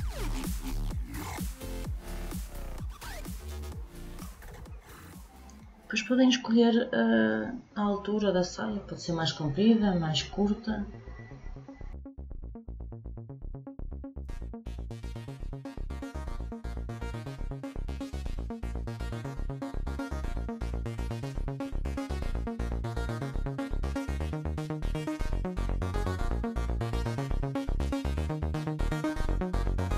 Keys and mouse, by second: 13.5-14.9 drag, 19.5-21.0 drag, 21.4-22.9 drag, 23.4 click, 27.8-29.4 drag.